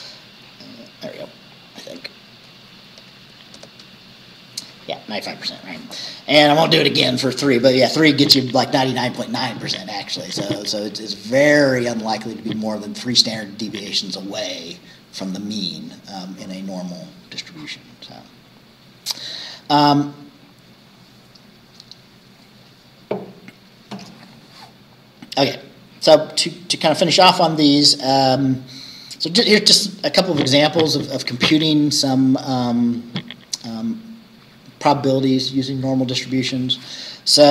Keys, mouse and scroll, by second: 1.6 click, 3.0 BackSpace, 3.6 Return, 18.2-18.5 scroll down 1, 19.4-19.8 scroll down 1, 20.5 scroll down 2, 26.7 scroll down 2.